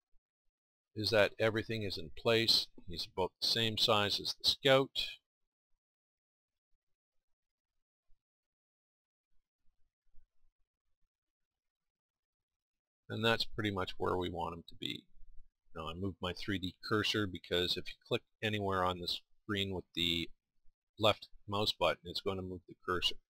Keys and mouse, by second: 1.6 middle click, 9.8 middle click, 12.1-13.4 middle drag.